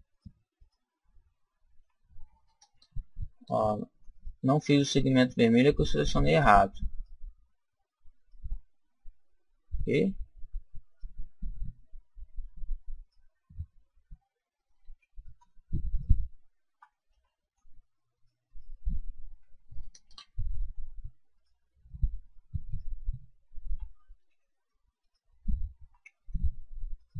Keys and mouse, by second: 1.9 right click, 2.8 ctrl+z, 3.4 ctrl+z, 4.1-10.1 right drag, 10.9-14.9 right drag, 14.9 ctrl+z, 15.9-17.8 right drag, 17.1 ctrl+z, 18.2 right click, 24.2 ctrl+z, 24.4 right click, 25.0-26.8 right drag, 26.2 ctrl+z, 27.0-27.1 right drag.